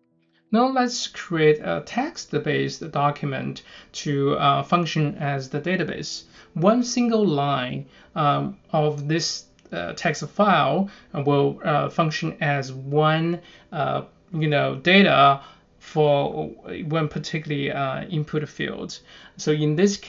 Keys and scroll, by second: 2.5-4.6 typing, 5.1 Return, 8.5-10.0 typing, 10.4 Return, 11.3 1, 12.6 BackSpace, 12.9 9, 14.2-16.6 typing, 15.7 Return, 17.8 6, 18.4 ., 19.0 9.